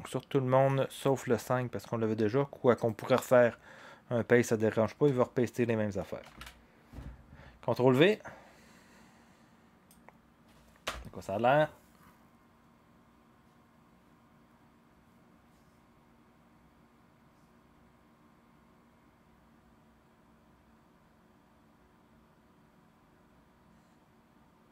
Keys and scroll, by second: 6.2 ctrl+v, 10.8 0.